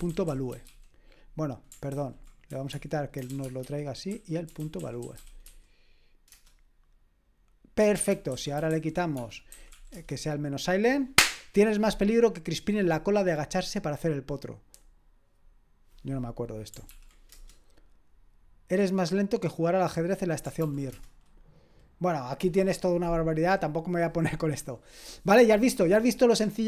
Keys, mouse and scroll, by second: 0.0-1.1 typing, 1.9 ctrl+w, 2.3-5.9 typing, 8.1 ctrl+p, 8.5 ctrl+a, 8.7 alt+f, 9.1-10.4 typing, 16.8 ctrl+p, 17.3 Return, 20.6 ctrl+p, 20.9 Return.